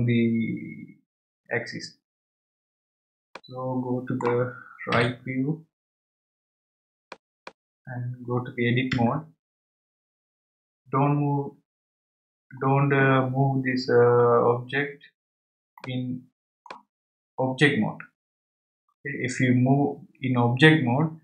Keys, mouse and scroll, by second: 3.3-5.9 middle drag, 7.0 click, 9.9 Tab, 15.8-18.9 middle drag.